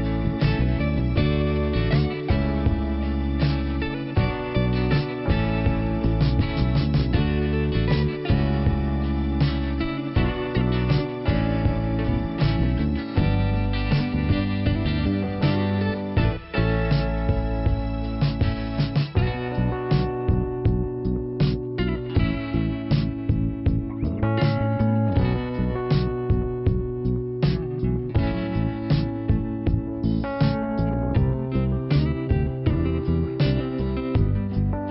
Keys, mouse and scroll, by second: 0.0 click, 1.3 click, 1.3 click, 5.0 click, 6.8 click, 8.1 click, 8.2 click, 8.6 scroll down 2, 9.6-10.2 scroll up 1, 10.2 /, 11.2 click, 12.3 click, 13.8 click, 14.4 click, 15.9 click, 18.6 click, 19.5 click, 19.6 click, 19.7 click, 20.0 right click, 20.0 double right click, 20.6 click, 22.3 m, 23.3 click, 24.1-24.9 scroll down 1, 24.1-25.0 typing, 27.5 click, 29.9 click, 31.6 n, 32.5 scroll up 2, 33.4 middle click.